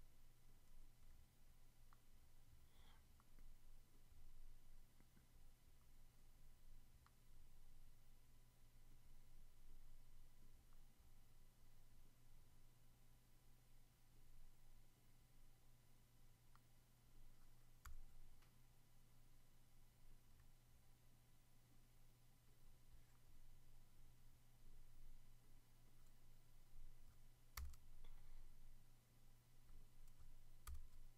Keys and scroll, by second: 17.8 Return, 27.5 super+BackSpace, 30.6 super+BackSpace.